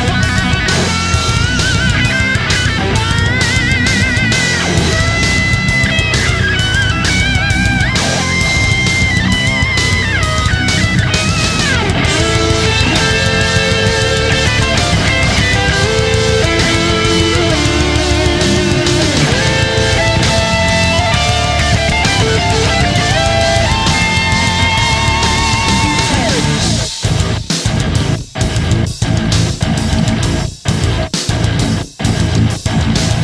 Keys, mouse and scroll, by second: 27.8 click.